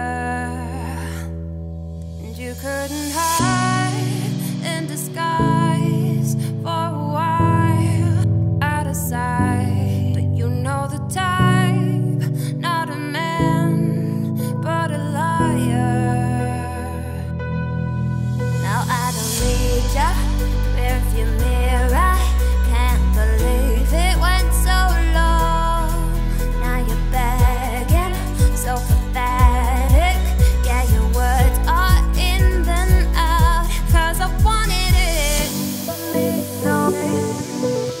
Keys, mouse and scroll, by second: 0.9 click, 1.3 scroll up 2, 1.7-2.7 middle drag, 2.7 click, 3.3 scroll down 1, 3.5-4.6 shift+middle drag, 4.6 click, 4.9 Tab, 5.6 a, 5.9 `, 6.3 scroll up 2, 7.7 Tab, 8.3 Tab, 9.3 shift+d, 12.7 ctrl+z, 13.4 Tab, 14.5 click, 14.7 Tab, 15.2 2, 15.3 click, 15.7 shift+s, 16.2 Tab, 16.5 shift+a, 18.1-18.6 scroll down 4, 18.6 r, 21.0-21.8 scroll up 4, 22.5 Tab, 23.0 z, 24.1 1, 25.4-27.7 drag, 27.7 g, 30.2 g, 32.4-34.3 drag, 34.3 g, 36.0 click, 36.4 g, 37.8 click.